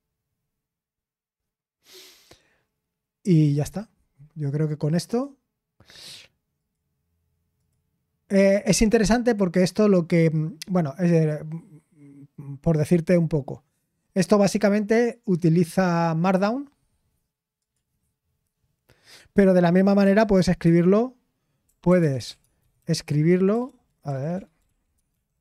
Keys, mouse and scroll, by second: 0.0-0.5 typing, 1.6-2.3 typing, 15.8-16.4 scroll down 1, 20.8-25.4 typing.